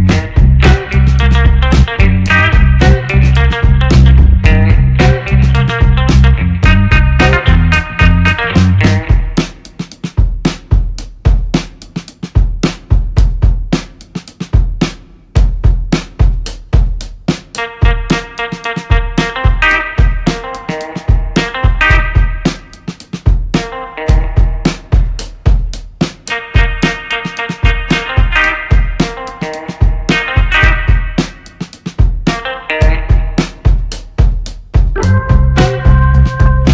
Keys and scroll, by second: 2.6 2, 2.8 Return, 10.2 2, 10.4 Return, 15.6 space, 21.8 shift+a, 22.0 l, 22.2 m, 22.4 t, 25.0 ctrl+c, 25.2 ctrl+v, 31.4 space.